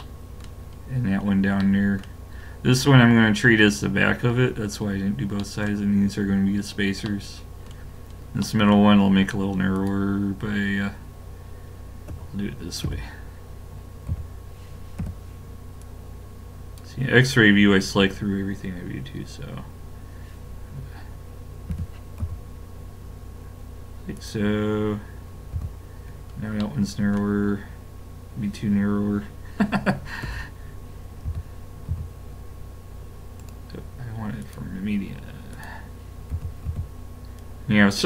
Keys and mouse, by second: 4.0-8.0 middle drag, 9.8 click, 12.1 KP_3, 12.9 KP_5, 14.1 z, 15.0 b, 21.7 g, 25.5 a, 26.3-29.0 middle drag, 30.2 l, 31.3 s, 34.4-35.6 drag, 36.3 s.